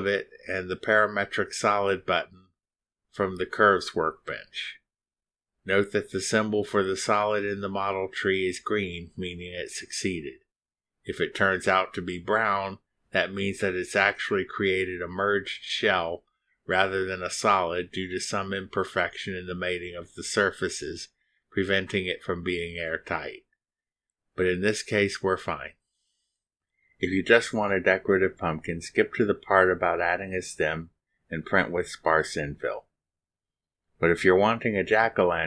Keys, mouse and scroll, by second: 1.2 shift+click, 7.7 click, 11.6 click, 12.2 space, 29.3 click, 30.4-31.5 middle drag.